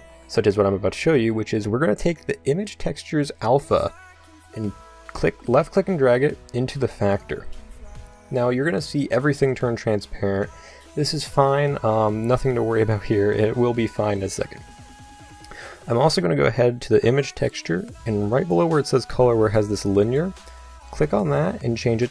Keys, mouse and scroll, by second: 20.9-22.1 drag.